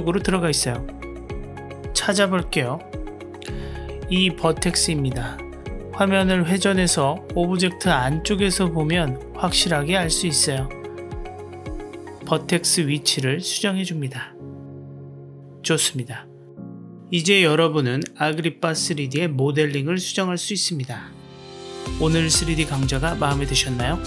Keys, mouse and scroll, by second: 5.2 middle click, 6.3 middle click, 7.7 middle click, 8.1 g, 10.7-11.9 middle drag, 12.2-13.3 drag, 13.4-13.8 middle drag, 14.1 click, 14.6-14.9 middle drag, 14.9-15.3 drag, 15.3 middle drag, 15.7 click, 17.0 Tab, 17.8 KP_Decimal, 18.6-20.4 middle drag, 20.7 Tab.